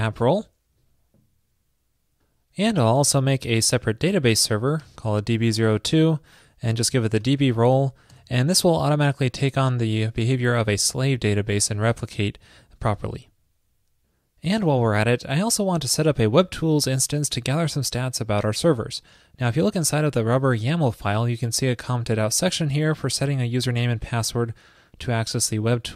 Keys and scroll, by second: 3.5 ctrl+a, 3.8 alt+Right, 3.9 alt+Right, 5.0 alt+BackSpace, 6.5 alt+Right.